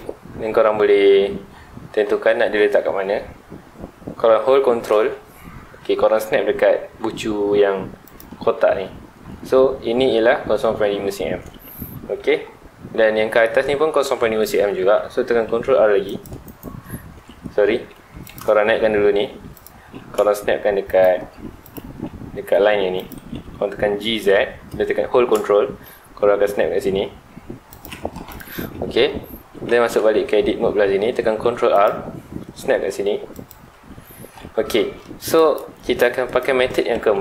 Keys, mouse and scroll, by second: 8.1 ctrl+click, 9.6-10.2 scroll up 1, 14.1 Tab, 15.4 ctrl+r, 16.6 right click, 17.0 middle click, 17.4 ctrl+z, 17.9 Tab, 18.2 click, 19.0 g, 19.6 click, 19.7 g, 21.0 ctrl+click, 21.6 click, 21.9 Tab, 23.0 click, 23.9 g, 28.3 click, 28.5 Tab, 31.3 ctrl+r, 33.5 ctrl+click, 34.0 scroll up 1, 34.9-37.2 middle drag.